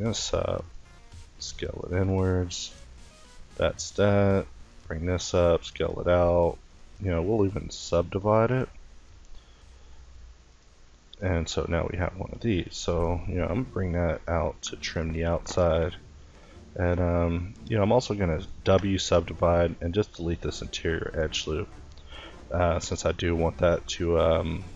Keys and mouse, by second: 0.3 s, 1.6 Tab, 2.4 Tab, 4.3 s, 5.7 s, 6.5 w, 8.7 e, 10.2 middle click, 11.0 ctrl+i, 16.1 s, 17.1 s, 17.1 w, 18.8 click, 19.6 x, 21.0 a, 21.7 l.